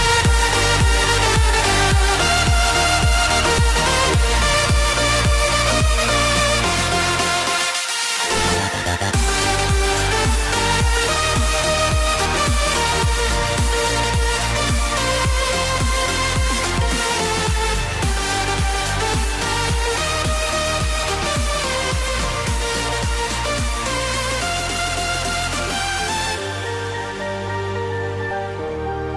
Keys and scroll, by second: 13.3 ctrl+c, 17.0 ctrl+v, 24.6 Return, 24.8-29.1 typing.